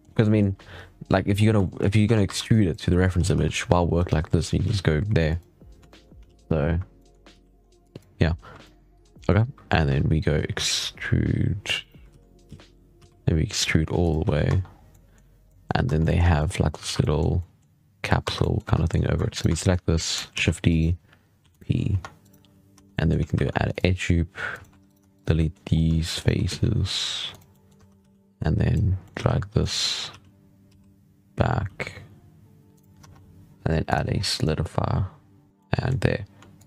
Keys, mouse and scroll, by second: 0.1 middle click, 0.3-1.5 scroll down 6, 1.5 shift+middle click, 1.7 scroll up 5, 1.9 Tab, 2.1 1, 2.4 drag, 3.0 g, 4.5 z, 5.2 click, 5.8 shift+middle click, 5.9 scroll down 1, 6.2 alt+a, 6.4-6.8 scroll up 9, 6.8 shift+middle click, 7.0 scroll down 6, 7.2 z, 7.5 scroll up 1, 7.7 click, 8.5 shift+middle drag, 8.8 scroll up 2, 9.0-9.7 shift+middle drag, 9.7 e, 11.9 ctrl+z, 12.8 e, 14.1 z, 14.3 Tab, 14.5 scroll down 4, 14.8-15.3 middle drag, 15.3 scroll up 1, 15.5 middle drag, 15.7 Tab, 15.9 middle click, 16.1 3, 16.2 middle click, 16.7 alt+a, 16.9-18.1 middle drag, 18.1 1, 18.3 middle drag, 18.5 3, 18.7-19.2 middle drag, 19.2 alt+shift+right click, 19.4 scroll down 1, 19.4-20.2 middle drag, 20.2 shift+d, 21.3 p, 21.8 Tab, 22.1 right click, 22.6 Tab, 22.8-23.2 middle drag, 23.2 ctrl+r, 24.6 3, 24.7 right click, 25.0 shift+right drag, 25.2-25.6 middle drag, 25.6 scroll up 2, 26.0 shift+right click, 26.3 x, 27.4 middle drag, 27.6 1, 28.2 click, 28.9 middle drag, 29.1 z, 29.5-30.0 middle drag, 30.0 g, 32.9 Tab, 33.7 click, 35.5-36.5 middle drag, 36.5-36.6 shift+drag.